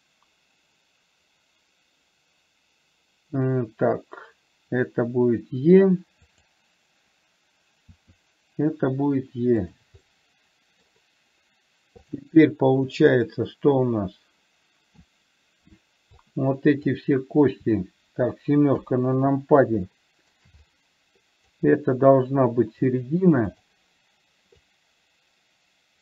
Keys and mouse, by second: 8.3 e, 10.5 middle click, 12.4 click, 13.5-15.4 middle drag, 16.6 click, 19.1 KP_7, 20.3 shift+middle click, 21.0-22.0 drag, 23.9 click, 24.9-26.0 drag.